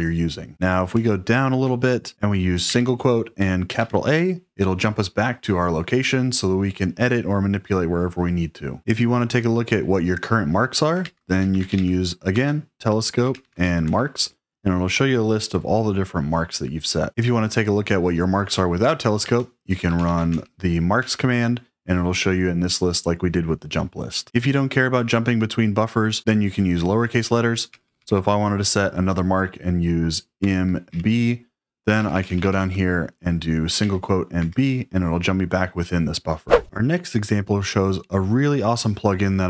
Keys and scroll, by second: 0.8 ctrl+d, 2.6 ', 3.6 shift+a, 10.7-15.0 typing, 12.3 Tab, 19.1-20.7 typing, 20.9 Return, 27.6 j, 27.8 j, 27.9 j, 28.1 j, 30.1-30.8 typing, 31.9-32.5 typing, 33.7 ', 34.3 b.